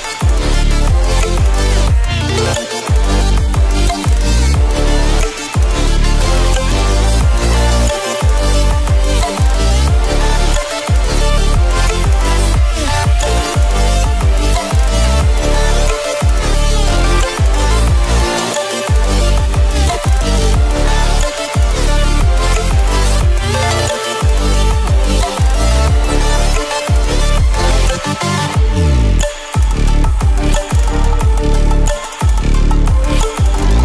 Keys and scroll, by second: 1.0 ctrl+t.